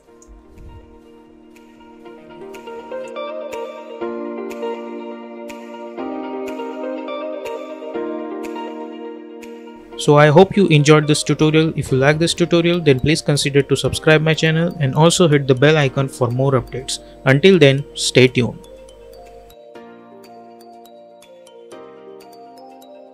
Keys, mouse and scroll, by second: 0.2 space, 2.2 space.